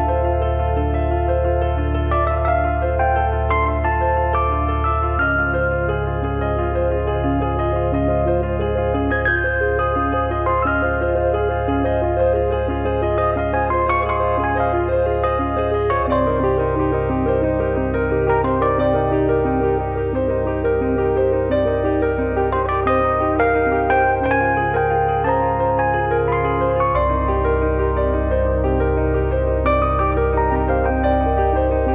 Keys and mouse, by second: 1.7 KP_7, 1.9 KP_9, 3.8 click, 4.8 click, 10.0 click, 12.9 click, 13.5 click, 15.6 click, 18.3 middle click, 18.6 middle click, 21.5 middle click, 26.2 click, 29.3 click, 30.7 click.